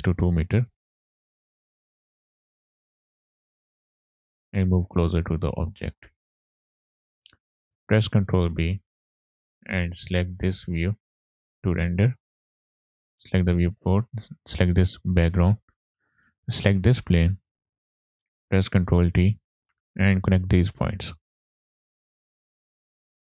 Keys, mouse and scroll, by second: 3.3 click, 8.4 ctrl+b, 13.1 scroll down 2, 13.4 middle click, 13.6 click, 14.0-14.4 scroll down 2, 15.8-16.2 scroll down 3, 16.2 middle click, 16.8 click, 17.5 drag, 19.4 ctrl+t, 19.6 click, 19.6 scroll up 3, 19.7 middle click, 20.7 click, 21.6 drag, 22.3-23.2 drag.